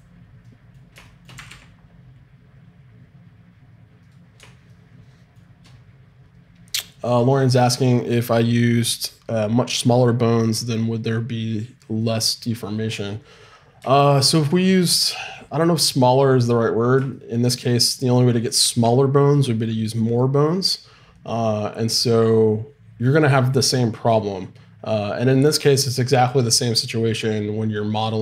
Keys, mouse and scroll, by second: 0.4-2.0 drag, 1.3 r, 2.0-3.8 middle drag, 4.5-14.6 middle drag.